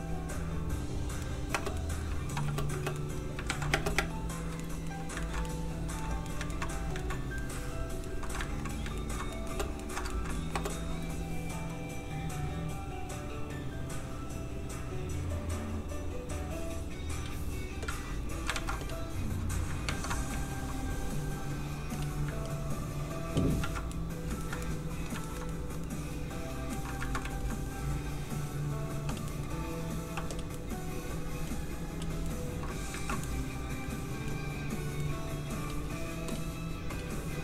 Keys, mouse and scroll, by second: 0.6 ctrl+middle click, 1.2 middle click, 1.3 middle click, 1.5 space, 1.8 middle click, 2.3 shift+middle click, 2.4 middle click, 2.5 space, 3.0 middle click, 3.5 ctrl+s, 3.7 space, 4.6 shift+middle click, 5.2 ctrl+middle click, 6.0 middle click, 6.4 ctrl+middle click, 7.0 ctrl+middle click, 8.4 ctrl+middle click, 8.7 middle click, 8.8 ctrl+middle click, 9.5 ctrl+space, 9.8 shift+middle click, 10.0 ctrl+middle click, 10.3 middle click, 10.4 middle click, 10.6 space, 11.7 click, 18.5 alt+shift+z, 19.8 ctrl+Tab, 20.3 shift+Tab, 21.8 f, 21.9 click, 22.4 ctrl+click, 23.6 ctrl+z, 23.9 middle click, 24.0 middle click, 24.3 ctrl+middle click, 25.2 shift+middle click, 25.5 middle click, 25.6 middle click, 27.0 ctrl+middle click, 27.2 shift+middle click, 27.5 middle click, 27.6 middle click, 28.9 f, 29.1 click, 29.3 middle click, 30.1 f, 30.3 click, 30.5 middle click, 31.5 click, 32.2 middle click, 32.9 ctrl+z, 33.3 middle click, 35.5 f, 35.6 click.